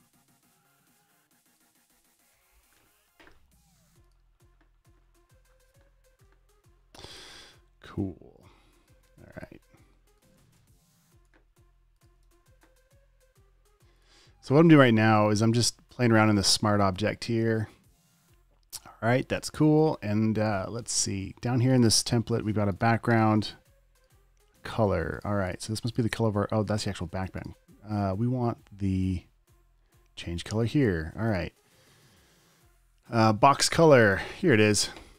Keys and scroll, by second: 2.6 super+s, 9.4 super+t, 10.7 alt+., 10.8 v, 11.3 super+a, 11.6 v, 12.6 v, 15.4 super+d, 15.8 super+s.